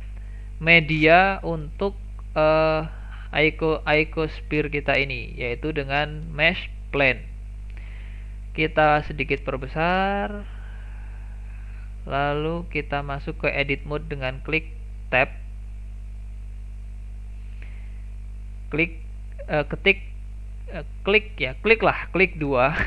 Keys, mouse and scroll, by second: 1.0-1.6 middle drag, 1.6 scroll down 1, 1.9-2.7 shift+middle drag, 2.7 scroll up 2, 3.0-4.1 middle drag, 4.1 shift+a, 7.4-7.7 scroll down 2, 7.7-8.8 middle drag, 8.8 s, 10.7-11.3 middle drag, 11.3-11.8 scroll up 1, 11.8-12.3 shift+middle drag, 12.3-12.6 scroll up 2, 12.6-15.8 middle drag, 16.3 Tab, 22.5 2.